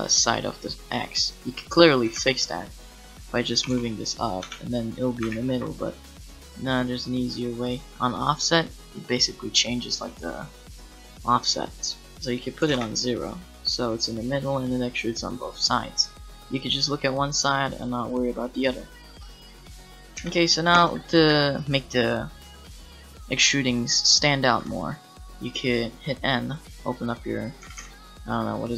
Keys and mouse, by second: 2.1 Tab, 3.6 g, 4.4 Tab, 5.3 ctrl+z, 12.3 click, 13.2-15.8 middle drag, 16.5-18.8 middle drag, 19.1 middle click, 20.2 KP_Decimal, 21.3 a, 22.8-24.5 drag, 24.6 n, 26.7 middle click, 27.6 n, 27.8 n.